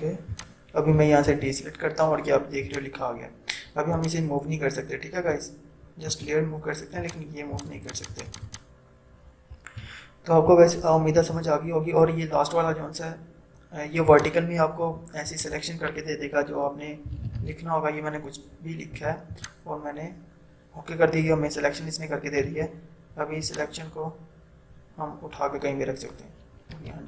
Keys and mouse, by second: 1.4 ctrl+d, 2.9-6.5 drag, 6.5 z, 7.2 click, 8.8 click, 10.1 0, 11.4 ctrl+d, 13.0 right click, 14.4 click, 16.9-17.9 typing, 19.3 click, 22.5 v, 23.5-26.8 drag, 26.8 ctrl+d.